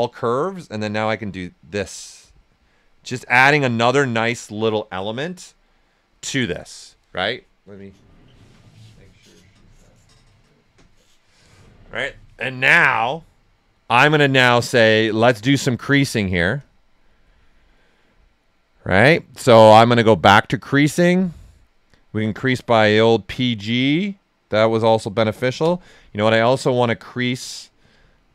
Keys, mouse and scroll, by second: 0.3-3.0 drag, 3.0 ctrl+right click, 5.4 shift+f, 13.9 shift+f, 14.0 alt+right click, 16.5-20.6 drag, 20.6 click, 22.6 alt+right click, 23.1-25.6 right drag, 25.6 space, 27.7 click.